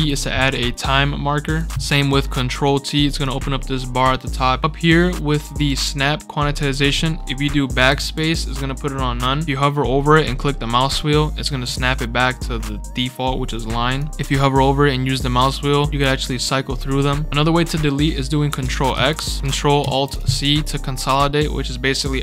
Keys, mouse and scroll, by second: 1.5 click, 3.2-4.6 drag, 5.6 click, 6.6 click, 6.9 scroll down 2, 7.9 BackSpace, 14.0 click, 18.9 ctrl+x, 19.8 ctrl+alt+c, 20.0 ctrl+alt+right click, 20.1 right click.